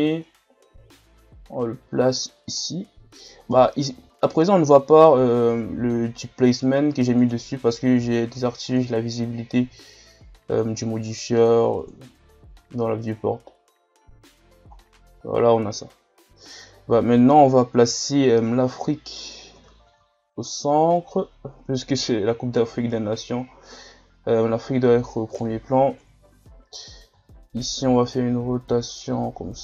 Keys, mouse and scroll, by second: 3.2-3.8 scroll up 1, 3.9 scroll up 1, 7.2-9.2 drag, 10.5 click, 12.9-14.4 drag, 14.4-14.9 scroll down 7, 16.5 KP_3, 17.9 KP_1, 18.6 scroll up 1, 19.5 r, 26.0 KP_3, 27.1 r.